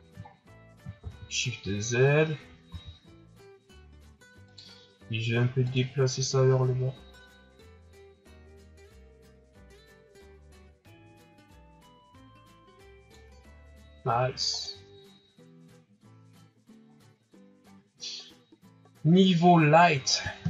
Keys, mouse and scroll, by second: 0.3-1.0 shift+scroll up 2, 1.2 shift+z, 2.7 s, 5.6-8.7 drag, 14.0 scroll down 1, 14.5 scroll up 2, 16.0 scroll down 4, 16.8 scroll up 3, 17.3 scroll down 5.